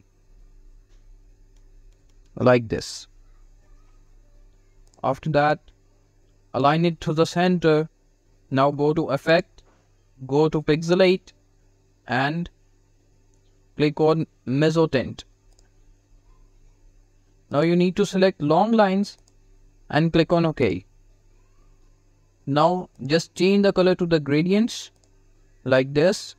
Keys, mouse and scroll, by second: 2.3 shift+Left, 3.8 v, 4.6-6.4 drag, 15.4 click, 17.3 click, 22.8 click.